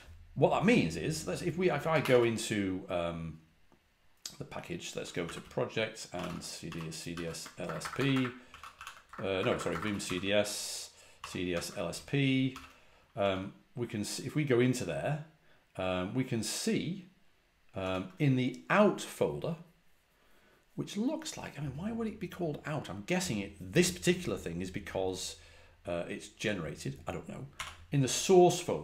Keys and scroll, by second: 1.8 ctrl+a, 2.0 c, 4.9-13.1 typing, 17.7 typing, 27.4 typing, 28.6-28.8 typing.